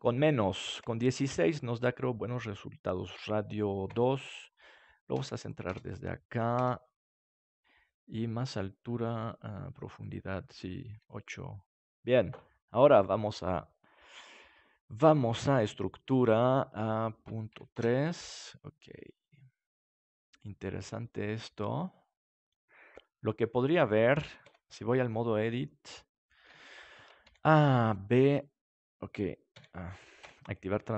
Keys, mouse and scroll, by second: 0.5-2.3 drag, 2.3-3.5 middle drag, 3.5-7.8 drag, 7.8 middle click, 7.9 right click, 8.1-11.8 middle drag, 12.8-14.6 drag, 16.8-18.4 drag, 18.4 middle click, 24.4 Tab, 26.4 KP_3, 27.2 a, 27.8 b, 28.3-30.4 drag, 29.5 a, 30.1 KP_3.